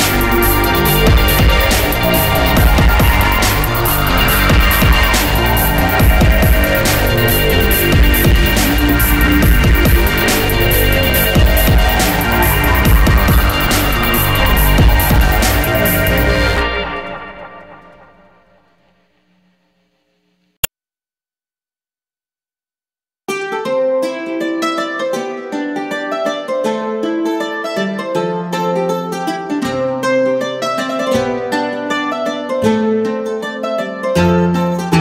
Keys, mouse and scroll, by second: 0.3 middle click, 1.2 ctrl+click, 3.7 middle click, 4.1 middle click, 4.9 click, 6.2 click, 6.5 middle click, 7.0 middle click, 11.4 click, 11.9 click, 12.7 ctrl+click, 13.4 middle click, 13.9 middle click, 14.9 ctrl+click, 16.2 middle click, 16.8 middle click, 17.6 ctrl+click, 18.7 middle click, 19.3 middle click, 19.9 ctrl+click, 20.8 middle click, 21.3 middle click, 22.2 ctrl+click, 24.8 middle click, 25.3 middle click, 26.2 click, 27.2 click, 27.7 middle click, 28.1 middle click, 28.1 scroll down 1, 28.8 middle click, 29.2 middle click, 30.5 click, 31.3 click, 31.4 ctrl+click, 32.4 middle click, 32.8 middle click, 33.5 ctrl+click.